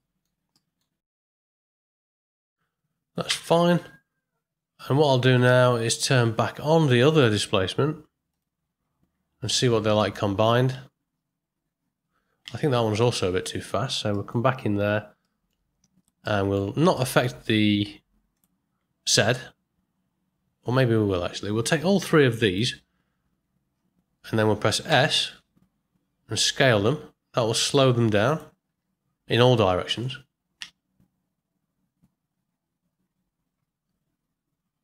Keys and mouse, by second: 0.6 ctrl+drag, 1.3-1.7 ctrl+drag, 3.3 space, 5.9 click, 8.3 click, 9.6 middle click, 10.7 space, 12.4 space, 13.0 click, 14.1 ctrl+middle click, 15.3 middle click, 16.2 ctrl+middle click, 16.9 middle click, 18.3 click, 21.9 click, 24.8 s, 29.9 shift+Left, 30.5 space.